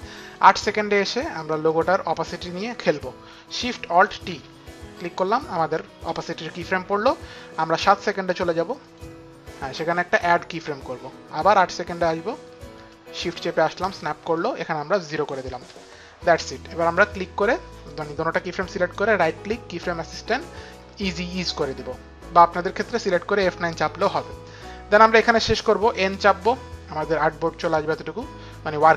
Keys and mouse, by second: 1.7 click, 4.1 alt+shift+t, 8.8 click, 10.6 click, 11.7 click, 14.4 click, 15.1 KP_0, 15.5 Return, 18.6 click, 18.6 Return, 18.6 KP_0, 18.8 right click, 19.7 Return, 19.7 click, 19.7 right click, 21.3 right click, 21.4 click, 26.5 n.